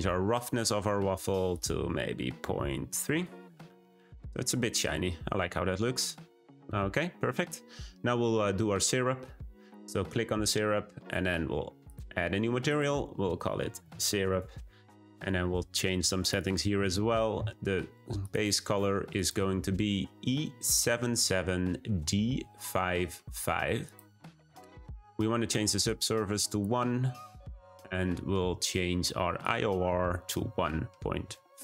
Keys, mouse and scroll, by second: 9.8 click, 11.9-15.6 drag, 25.9-31.6 drag.